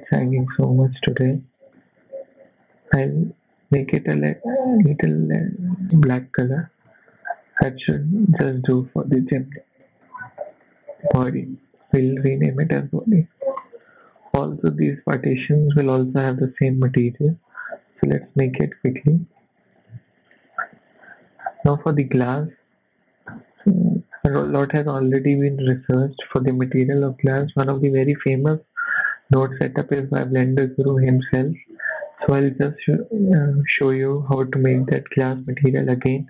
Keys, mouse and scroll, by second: 1.0 middle click, 1.8 middle click, 1.8-2.7 scroll up 1, 2.7 click, 4.1 click, 5.9 click, 5.9 scroll down 2, 6.0 shift+middle click, 6.5 scroll up 4, 6.8 shift+middle click, 7.2-7.9 scroll down 5, 8.8 click, 11.8 middle click, 12.9 middle click, 13.4-14.3 scroll up 4, 13.6 shift+middle click, 14.9 click, 16.9 click, 20.2 click, 22.9 scroll down 5, 23.5 click, 27.6 click, 27.6-30.0 scroll down 5, 30.0 click, 30.9 x, 34.8 click, 34.8 middle click, 34.8-36.2 scroll up 2.